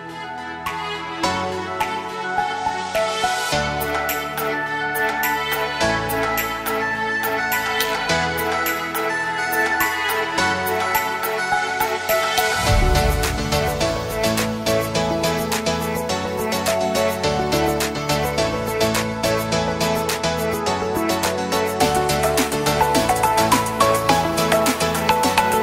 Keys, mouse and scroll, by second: 0.6 Up, 1.2-3.3 drag, 4.9-5.2 alt+scroll down 2, 5.4 click, 10.5 scroll up 1, 11.9 click, 15.3-15.6 scroll down 1, 16.1 alt+scroll down 1, 17.1-22.2 drag, 25.3 click.